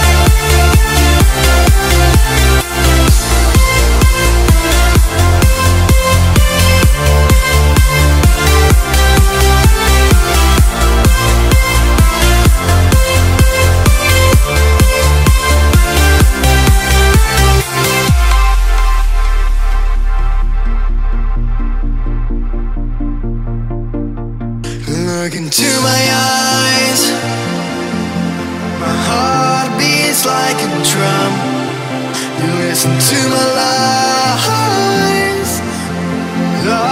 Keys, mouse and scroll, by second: 0.7-2.6 typing, 4.5-9.6 drag, 9.8 right click, 11.5 click, 15.0 right click, 15.9 click, 16.6-17.8 typing, 18.2 click, 20.5-21.9 typing, 22.8 click, 24.0 right click, 24.3 Tab, 24.4 F10, 25.1-26.6 scroll down 1, 26.6-27.7 drag, 27.3-28.6 typing, 29.1 click, 30.0-30.4 scroll down 1, 30.8 click, 31.8-33.7 drag, 33.1-34.3 typing, 35.2-36.9 drag.